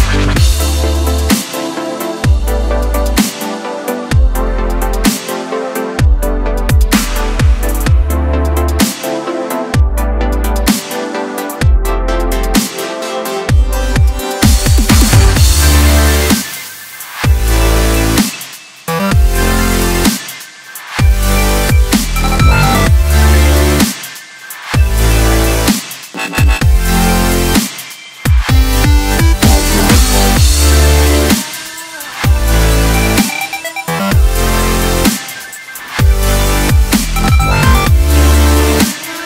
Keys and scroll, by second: 16.8 g.